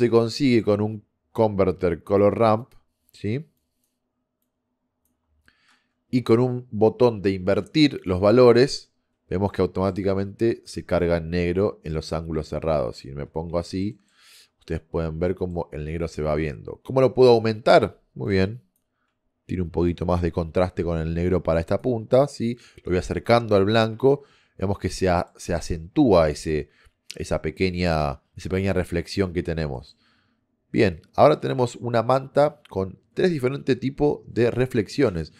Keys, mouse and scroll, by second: 2.8 click, 3.7 click, 5.0 click, 19.2-23.0 drag, 24.8-26.7 middle drag, 29.0-33.2 middle drag.